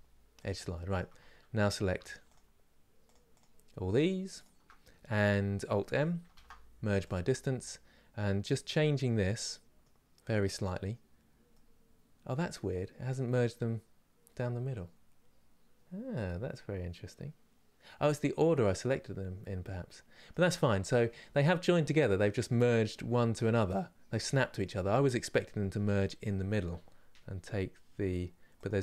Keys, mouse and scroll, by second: 0.4-1.7 middle drag, 1.7 shift+click, 2.0 shift+click, 6.7 alt+m, 8.4 click, 9.2-10.3 middle drag, 10.3 click, 11.2-19.9 middle drag, 20.6-28.8 middle drag.